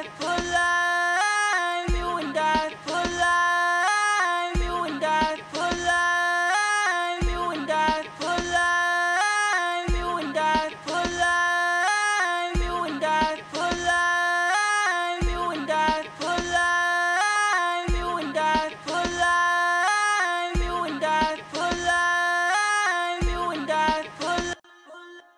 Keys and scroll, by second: 0.0-2.7 typing, 3.9-5.3 typing, 16.0-17.1 typing, 18.7-19.9 typing, 22.4-23.9 typing.